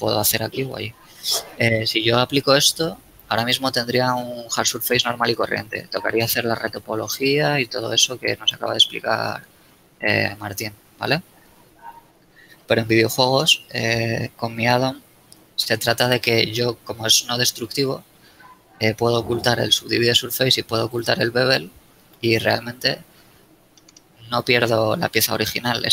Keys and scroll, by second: 4.0 z, 5.4 shift+a, 22.7 z.